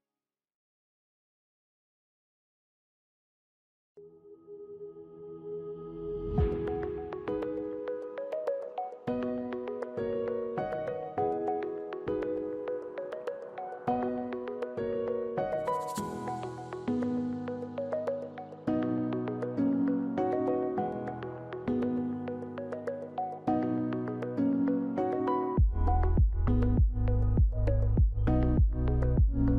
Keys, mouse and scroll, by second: 18.3 u.